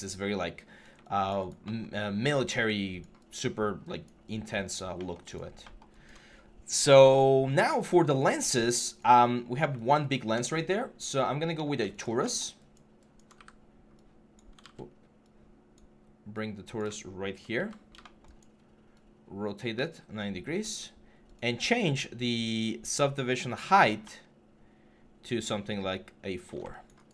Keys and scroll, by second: 14.4 ctrl+z, 17.4 e.